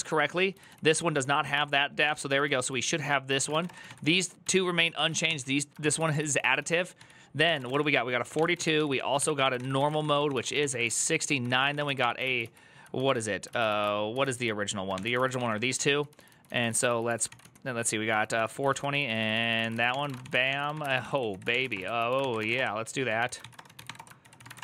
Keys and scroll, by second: 0.0-24.6 typing, 12.2 ctrl+u, 13.2 ctrl+u, 13.9 ctrl+u, 18.1 ctrl+a, 18.3 ctrl+a, 19.1 ctrl+a, 19.3 ctrl+c.